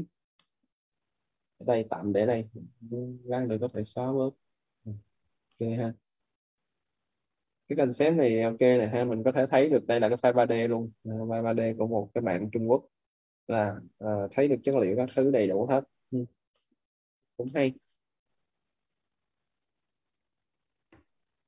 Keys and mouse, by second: 0.2 middle click, 2.7 click, 5.3 middle click, 5.8 click, 9.4 middle click, 12.9 click, 14.9 middle click, 18.7 click.